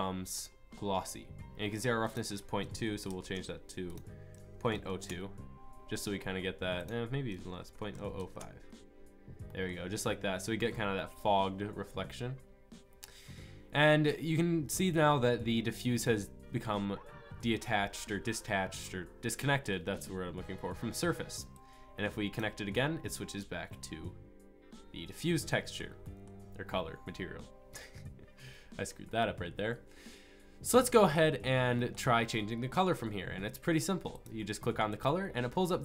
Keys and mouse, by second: 8.4 KP_0.